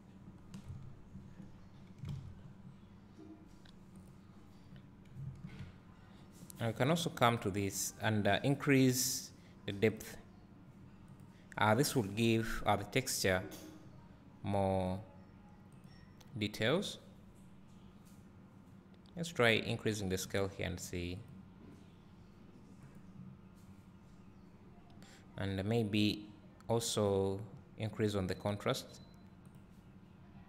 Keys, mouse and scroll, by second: 0.7 KP_0, 2.0 scroll down 2, 2.2 alt+a, 3.4-4.2 scroll up 1, 4.7 click, 10.7-17.3 drag, 22.0-30.4 drag.